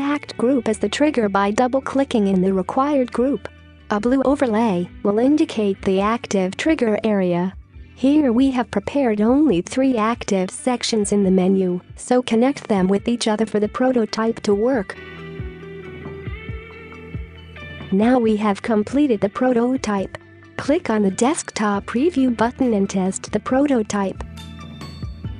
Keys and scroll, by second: 17.5-18.2 space.